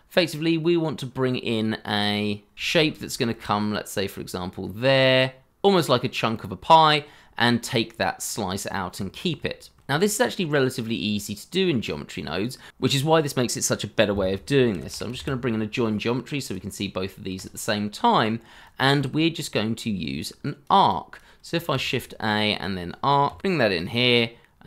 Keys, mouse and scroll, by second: 2.1 t, 9.8 ctrl+z, 10.6-12.7 scroll down 1, 14.7 j, 14.9 o, 15.0 i, 15.1 n, 21.5-23.2 typing.